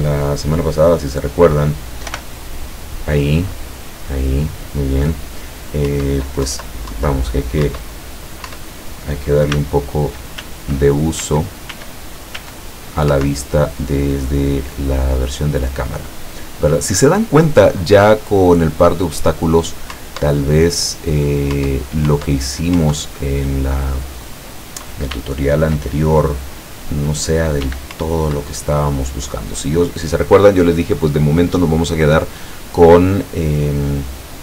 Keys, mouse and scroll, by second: 2.2 p, 6.0 Up, 6.5 Down, 7.8 Up, 8.6 Up, 9.6 s, 13.2 Up, 20.0 Up, 21.6 Up, 25.2 w, 27.7 w, 28.0 Up.